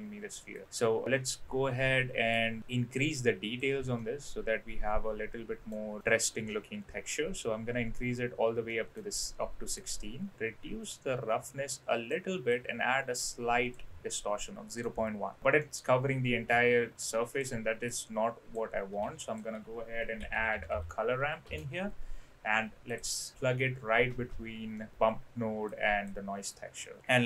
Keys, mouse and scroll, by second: 1.0-2.4 drag, 2.9 click, 4.0-5.7 middle drag, 8.7 middle click, 9.8-12.1 drag, 12.5-13.7 drag, 14.4-14.8 middle drag, 15.6-16.4 middle drag, 16.9 click, 17.8 click, 19.1 shift+a, 24.7 middle click, 25.6 click, 26.4 click.